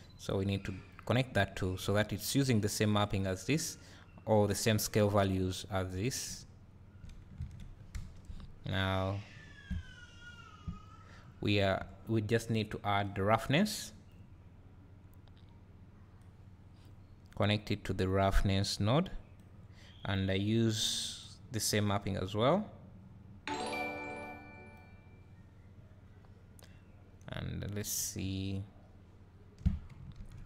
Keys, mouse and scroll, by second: 0.0 click, 1.0-3.4 drag, 6.3 `, 7.4 alt+a, 8.3 KP_0, 9.3 `, 10.8 scroll down 1, 11.2 `, 14.4 click, 16.2-30.4 drag.